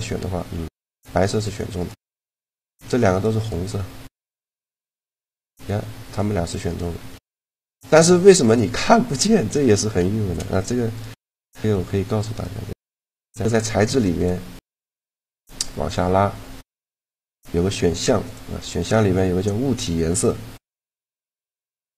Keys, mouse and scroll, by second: 0.3 g, 1.5 right click, 1.9 shift+d, 4.7 shift+g, 5.9-8.5 drag, 7.5 g, 9.4 a, 10.7-13.2 drag, 13.2 right click, 14.7 right click, 14.8 click, 17.6-19.8 drag, 19.9 middle click, 20.6-21.9 drag.